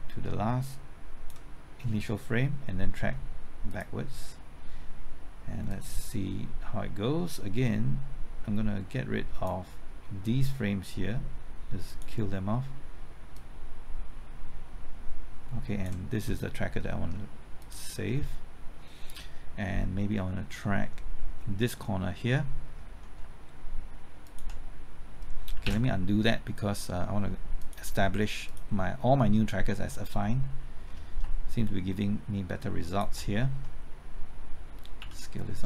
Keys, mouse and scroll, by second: 16.8 middle click, 17.6 click, 20.5 middle click, 24.2 ctrl+click, 25.6 ctrl+z, 26.8 middle click, 27.6 click, 30.2 middle click, 32.8 ctrl+click, 35.0 s.